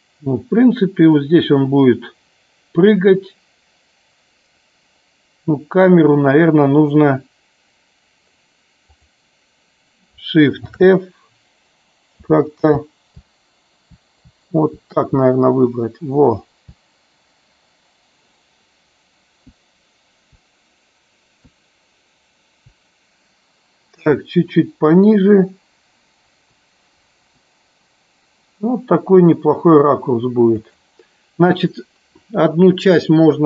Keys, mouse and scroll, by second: 9.0 click, 10.7 shift+f, 12.3 ctrl+a, 13.3-13.9 Left, 15.2-16.6 Left, 19.6-20.3 Up, 21.4 Right, 24.0 Up, 24.5 Up, 24.7 Up, 26.3 Down, 30.5 click.